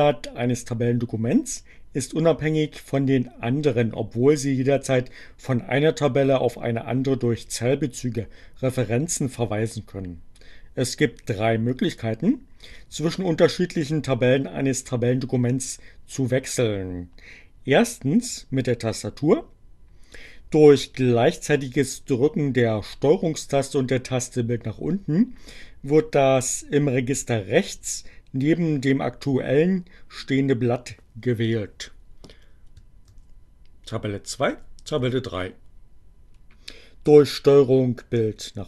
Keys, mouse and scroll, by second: 32.0 ctrl+Page_Down, 34.6 ctrl+Page_Down.